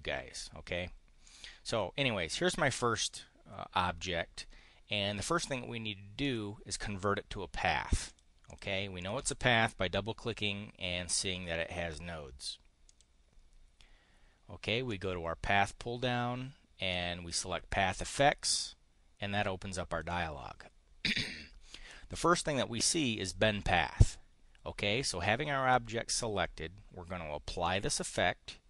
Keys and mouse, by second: 1.2 click, 6.2 click, 8.0 click, 8.3 click, 8.9 click, 12.8 click, 14.8 click, 16.8 click, 18.5-20.0 drag, 27.6 click.